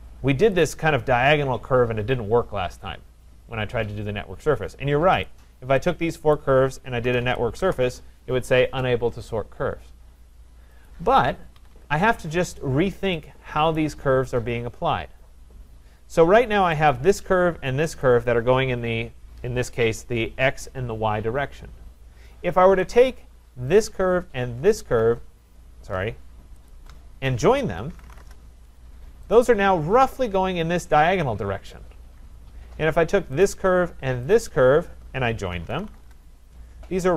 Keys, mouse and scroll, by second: 0.6 click, 5.3 click, 6.4 click, 6.8-8.1 typing, 10.9 click, 11.6 Escape, 11.7 Escape, 13.8 right click, 17.2 click, 18.0 click, 23.1 click, 23.8 click, 24.2-24.8 Caps_Lock, 24.8 click, 26.7 shift+click, 27.0 shift+click, 27.6-28.6 typing, 29.4 click, 29.6-30.4 typing, 33.4 click, 34.4 shift+click, 35.3-36.2 typing.